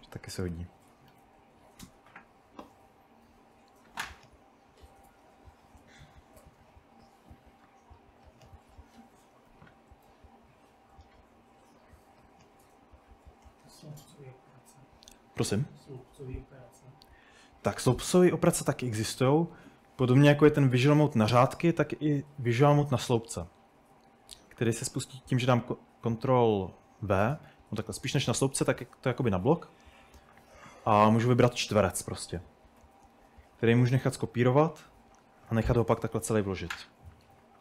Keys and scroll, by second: 0.0-2.2 typing, 18.4-19.8 typing, 21.0-24.6 typing, 22.1 Escape, 24.7 ctrl+v, 28.1-30.8 typing, 32.8-34.9 typing, 37.1-37.6 typing.